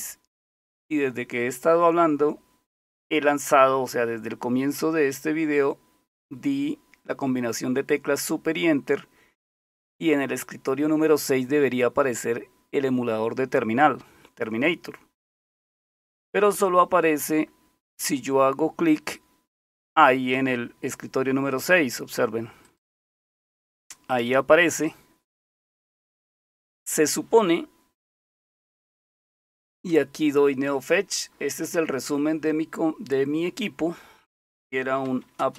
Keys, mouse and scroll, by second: 22.6 click, 27.9-29.9 typing, 34.7-35.5 typing.